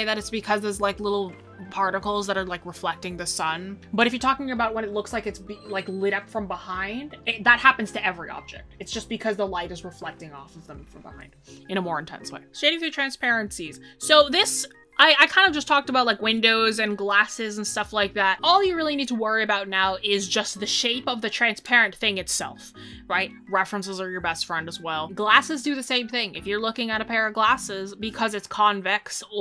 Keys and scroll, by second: 12.4 ctrl+s.